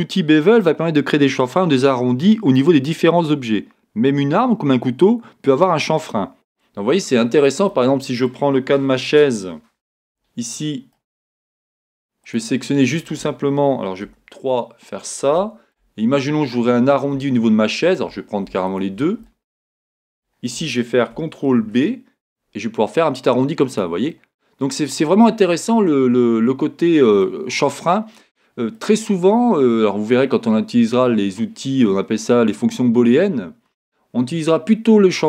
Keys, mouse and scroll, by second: 12.3 click, 14.1 3, 14.5 click, 15.4-18.7 middle drag, 18.7 shift+click, 19.3-23.8 shift+middle drag, 19.7-20.2 scroll up 2, 21.7 ctrl+b, 24.1-34.0 middle drag, 27.6 scroll, 28.7 scroll down 1.